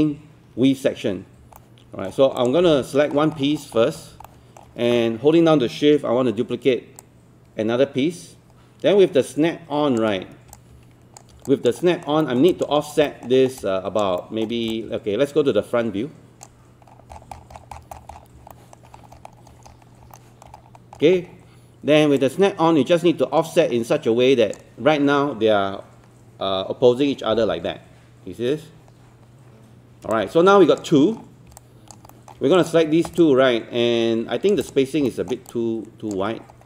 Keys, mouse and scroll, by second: 1.1-1.4 scroll down 1, 1.6 alt+middle click, 2.4 click, 3.2 scroll down 1, 4.3 alt+middle click, 7.0-10.0 shift+drag, 10.6 click, 11.5 alt+click, 11.8 alt+middle click, 12.2 alt+middle click, 12.5 alt+click, 12.8 scroll up 1, 13.1 alt+middle click, 13.6 alt+click, 14.2 alt+middle click, 14.8-16.9 drag, 16.9 scroll down 1, 18.6 alt+middle click, 19.0 scroll up 1, 19.3 scroll down 1, 19.4-19.7 scroll up 1, 20.2 alt+middle click, 20.6-20.9 scroll up 1, 22.2-25.1 drag, 30.1 space, 31.2-31.5 scroll down 1, 31.6 alt+click, 32.1 alt+middle click, 32.6 click, 33.2 alt+click, 34.6 click, 35.5 click, 36.3 scroll up 1.